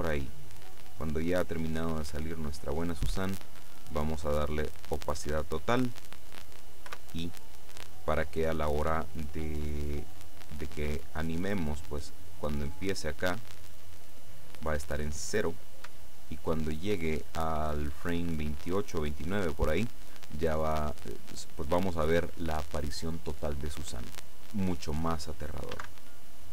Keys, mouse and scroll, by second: 3.9-5.6 drag, 6.9 i, 11.5-14.8 drag, 25.8 alt+a.